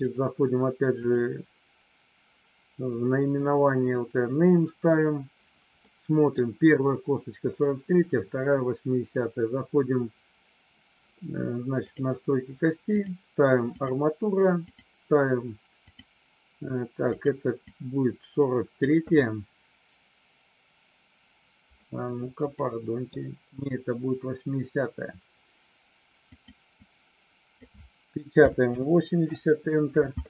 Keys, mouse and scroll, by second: 1.0 click, 5.7 middle click, 12.9-13.9 drag, 14.7-16.0 drag, 17.1-30.1 drag.